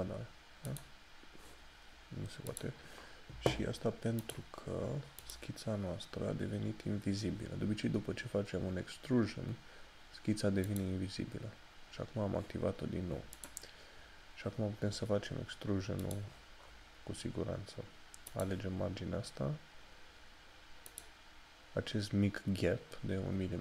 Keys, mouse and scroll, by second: 0.7 click, 10.7 click, 13.6 click, 14.0 scroll down 1, 16.1 click, 18.4 click, 21.4 click.